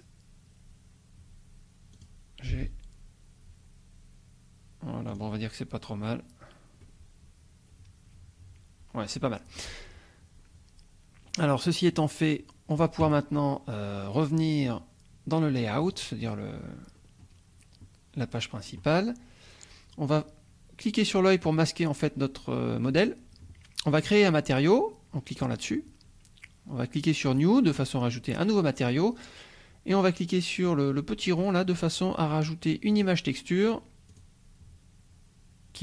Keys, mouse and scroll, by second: 1.9 click, 2.5 g, 5.1 click, 5.5-6.1 scroll down 3, 6.8-9.5 drag, 11.9 click, 15.8 click, 17.0-20.3 scroll up 1, 21.2 click, 25.4 click, 27.2 click, 31.4 click, 32.9 click, 34.1 click.